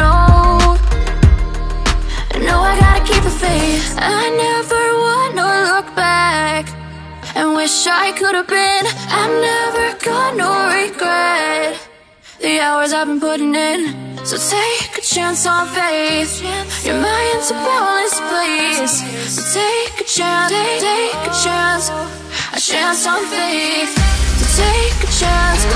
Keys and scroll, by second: 2.8 ctrl+t, 16.3 ctrl+z, 18.0 ctrl+z.